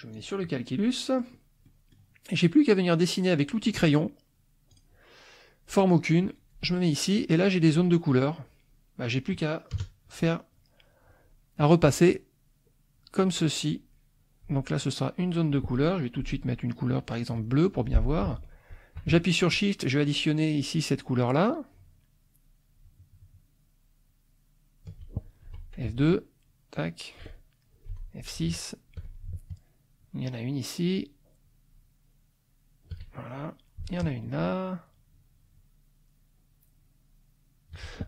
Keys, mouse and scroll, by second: 0.1 click, 1.1 middle click, 1.6 middle click, 4.7 click, 7.6 click, 9.0 click, 9.4 middle click, 9.8 KP_Add, 10.2 click, 11.6-14.6 drag, 15.0 middle click, 17.3 click, 17.8 middle click, 19.5-25.0 shift+drag, 25.5 F2, 25.9 ctrl+click, 26.5 ctrl+click, 27.6 middle click, 27.9 F6, 30.0-33.1 shift+drag, 33.3 shift+middle click, 34.2-37.9 shift+drag.